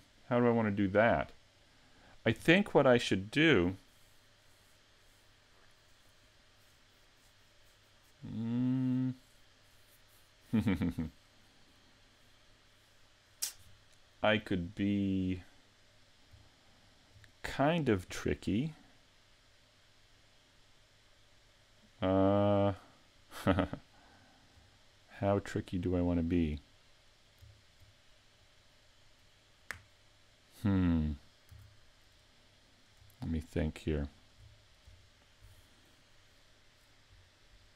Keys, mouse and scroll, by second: 1.0 middle click, 15.0 middle click, 16.6 shift+middle click, 18.4 middle click, 24.6-25.0 scroll up 4, 25.0 middle click, 26.2 right click, 27.6 shift+right click, 28.5 middle click, 31.5 a, 32.7 right click, 33.5 shift+right click, 34.2 shift+right click.